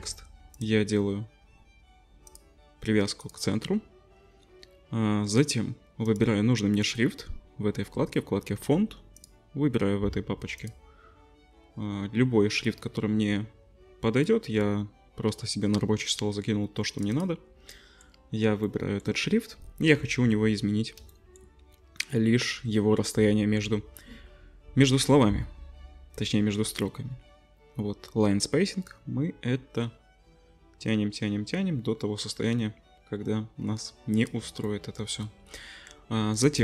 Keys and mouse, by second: 0.5-17.2 drag, 17.2-28.9 middle drag, 28.9-36.6 shift+drag.